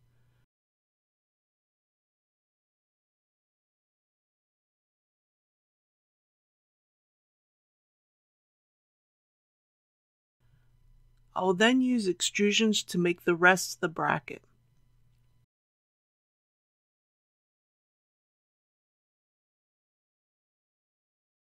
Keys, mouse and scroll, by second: 1.1 click, 3.6-5.0 middle drag, 6.0 alt+click, 8.0 ctrl+f, 9.0 click, 10.2 alt+a, 18.8 KP_1, 19.3 3, 20.0-20.3 scroll up 1, 21.0 shift+middle click.